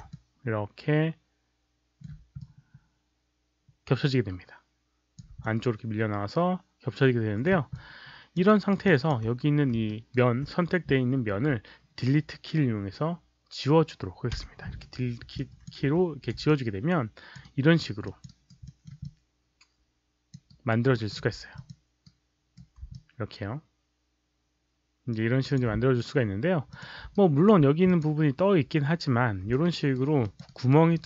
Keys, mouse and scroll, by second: 0.0-1.9 middle drag, 2.3-5.1 alt+drag, 5.3-7.4 middle drag, 7.6 alt+click, 8.4 alt+right click, 8.4 alt+middle click, 8.8 alt+click, 9.8 alt+right click, 14.2 Delete, 15.3 alt+click, 15.8 5, 16.4 alt+click, 17.3 alt+right click, 17.9 alt+click, 18.2 alt+right click, 18.6 alt+middle click, 18.9-20.2 alt+drag, 20.4 alt+right click, 20.8 alt+middle click, 21.4 click, 22.0-22.5 right drag, 22.8-25.5 alt+drag, 26.6 click, 27.1 alt+right drag, 27.8 click, 29.5-29.9 alt+right drag, 30.1 alt+click, 30.4 alt+right click, 30.8-31.0 alt+drag.